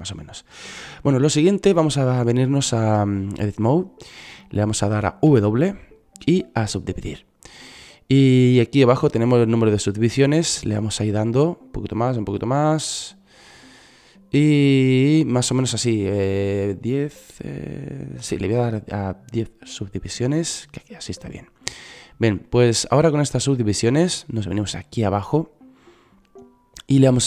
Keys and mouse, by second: 3.5-4.5 drag, 5.6 w, 17.6-19.3 drag, 19.6 middle click, 20.8-22.0 drag, 22.0 middle click.